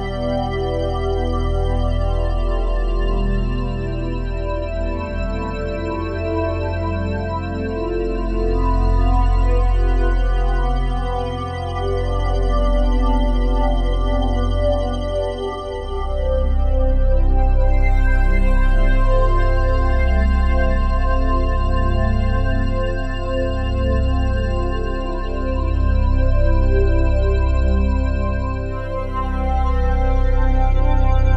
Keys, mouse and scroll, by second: 2.4 shift+click, 3.8 click, 5.3 click, 7.7-8.3 typing, 8.5 Return, 10.5 ctrl+s, 11.0 ctrl+alt+click, 13.4 alt+shift+click, 17.3-17.8 alt+shift+drag, 19.5-25.7 alt+shift+drag, 25.7 ctrl+a, 27.7-28.2 typing, 29.4-31.3 typing.